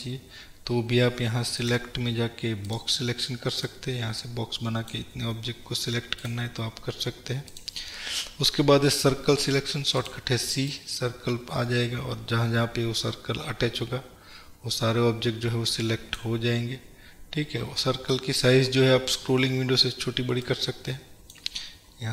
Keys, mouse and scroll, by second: 1.7-6.4 drag, 7.7-22.1 drag.